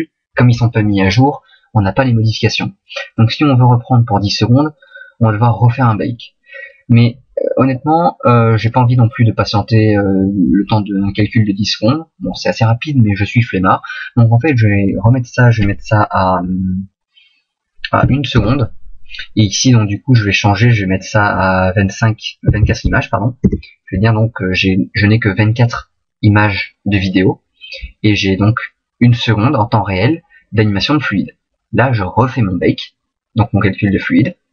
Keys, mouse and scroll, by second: 33.0 click.